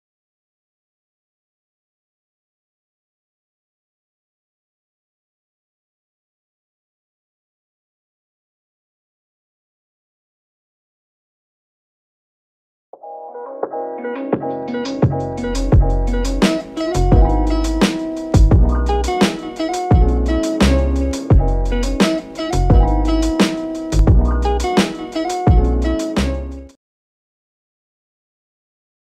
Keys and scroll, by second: 0.8-2.5 typing, 4.9-5.2 typing, 5.4 Return, 7.9-8.3 typing, 8.5 Return.